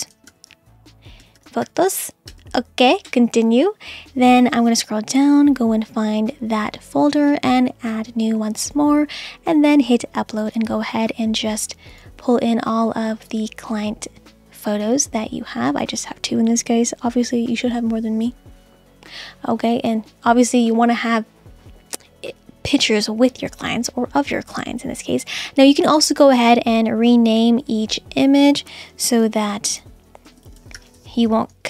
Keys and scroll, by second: 0.0-1.8 typing, 2.3 Return, 28.9-31.6 typing.